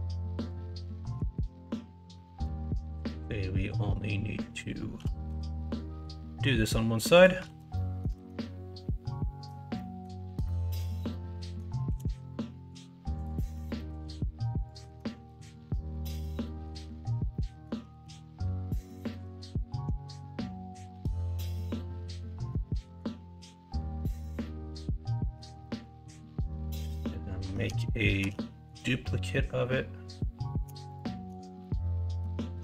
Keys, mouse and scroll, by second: 1.1 s, 2.2 ctrl+z, 4.9 g, 7.4 alt+z, 7.7 middle click, 8.1 alt+z, 8.3-9.4 middle drag, 9.7 middle click, 10.4-11.1 scroll up 1, 11.1 middle click, 11.8 s, 13.5 g, 14.8 alt+z, 15.0-15.9 scroll up 2, 15.9-16.3 scroll down 1, 16.3 middle click, 16.3 scroll up 1, 16.6 scroll down 1, 17.3 middle click, 17.3-17.6 scroll up 1, 17.6 scroll down 1, 17.9 ctrl+z, 18.8 s, 21.7 middle click, 22.3 alt+z, 22.6 middle click, 22.9 scroll down 1, 24.4 middle click, 25.3-26.4 scroll down 2, 25.6 middle click, 26.4 scroll up 1, 26.6 middle click, 26.8 middle click, 27.4 Tab, 28.2 shift+d, 31.4 middle drag.